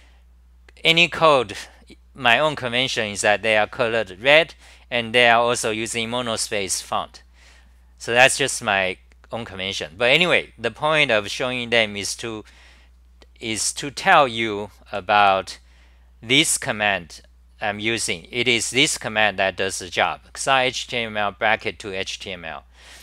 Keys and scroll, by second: 12.9-14.1 scroll, 14.1 w, 16.3-17.0 scroll up 4, 16.3 typing, 17.0-17.9 scroll down 8, 20.8 1.